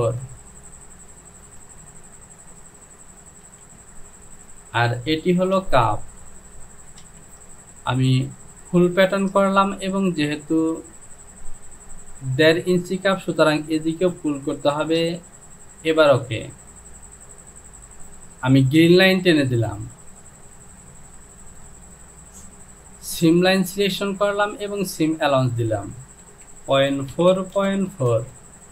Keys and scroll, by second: 0.0 Down, 3.6 j, 5.4 Home, 7.1 Delete, 26.8 KP_Decimal, 27.1 KP_4, 27.4 Down, 27.6 KP_Decimal, 27.9 KP_4, 28.1 Down.